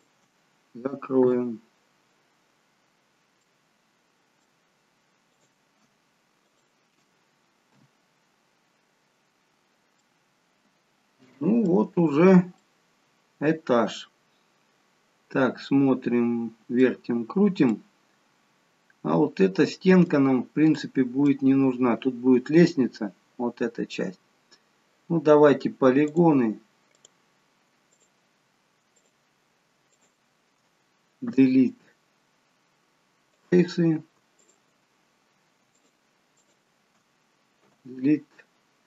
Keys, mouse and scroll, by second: 1.3 f, 2.3-3.0 scroll down 2, 3.0-3.7 scroll up 2, 3.5 middle click, 5.4 click, 6.4 shift+click, 7.7 f, 8.8-10.0 scroll down 12, 10.0 middle click, 12.6 middle click, 17.1 scroll up 3, 17.9 middle click, 20.3 scroll down 1, 20.7 middle click, 26.2 click, 26.9 click, 28.0 shift+click, 28.7 shift+click, 29.9 click, 31.2 Delete, 34.4 shift+click, 37.6 Delete.